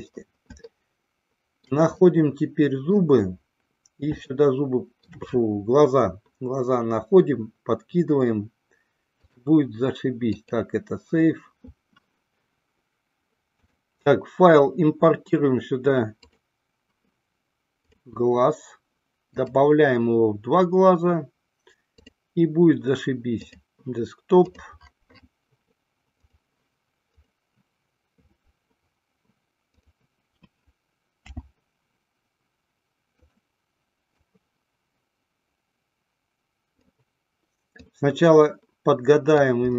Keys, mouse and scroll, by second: 0.8-1.5 shift+middle drag, 1.7 shift+middle click, 2.2-3.3 middle drag, 4.4-5.4 shift+middle drag, 9.3-10.7 drag, 12.3 KP_1, 13.8-17.0 drag, 19.5-22.6 drag, 30.0 click, 31.5 s, 33.5 click, 34.4-37.1 drag, 38.0-39.7 drag.